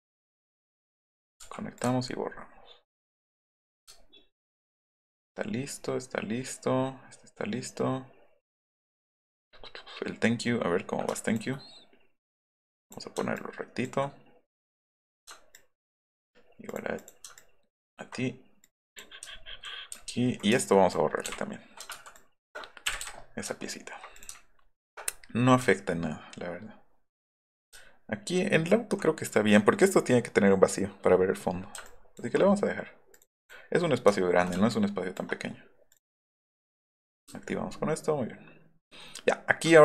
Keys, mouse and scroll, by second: 0.0 click, 0.7 click, 1.4 v, 2.1 alt+middle click, 2.2 alt+right click, 2.3 alt+middle click, 2.6 alt+middle click, 2.9 alt+middle click, 3.5 click, 3.9 alt+middle click, 4.0-4.6 alt+scroll up 3, 5.4 alt+scroll up 1, 5.5 alt+middle drag, 6.7 alt+middle click, 8.8 alt+middle click, 9.1 alt+middle click, 9.5 alt+middle click, 10.6 alt+middle drag, 11.1 ctrl+click, 12.5 click, 12.8 click, 13.3 ctrl+click, 14.6 click, 14.9 click, 15.5 ctrl+click, 16.7 click, 16.9 click, 17.4 ctrl+click, 19.3 alt+middle click, 19.9 alt+middle click, 20.2 alt+middle click, 20.6 ctrl+click, 22.1 ctrl+click, 22.9 Delete, 23.0 Delete, 23.5 alt+middle drag, 24.1 click, 24.4 alt+middle click, 24.7 alt+middle click, 25.6 alt+middle click, 25.9 alt+middle click, 26.3-27.2 alt+scroll up 3, 27.7 alt+middle click, 28.2 alt+middle click, 28.8 alt+middle click, 31.8 ctrl+click, 34.2 alt+middle click, 34.2 alt+scroll up 2, 34.7 ctrl+click, 35.9 click, 36.1 click, 36.4 click, 36.8 click, 37.1 click, 37.4 alt+middle click, 37.7 alt+middle click, 37.9 alt+scroll up 1, 38.7-39.5 alt+scroll up 4.